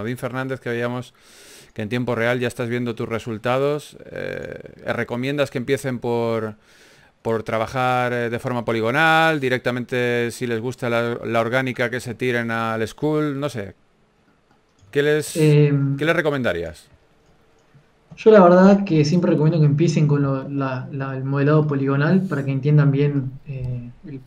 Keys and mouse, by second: 0.0 r, 1.1 KP_1, 1.9 click, 2.5 r, 3.9 click, 4.5 r, 5.1 r, 5.7-7.5 right drag, 6.1 r, 7.2 r, 8.0 r, 9.0 a, 10.4 KP_3, 15.1 click, 15.7-18.5 typing, 19.1 click, 20.9 KP_1.